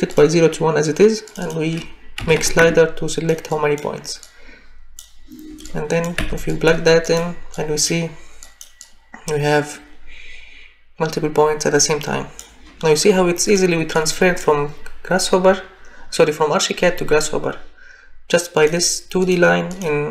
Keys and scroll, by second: 2.2 1, 2.4 5, 2.6 Return, 6.2 Delete.